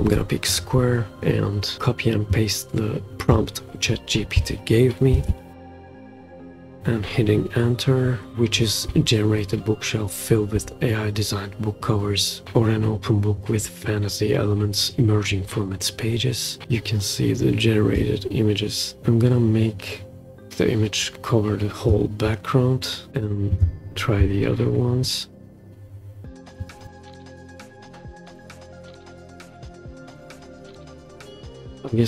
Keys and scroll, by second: 5.1 super+c, 5.5 super+v, 6.8 Return.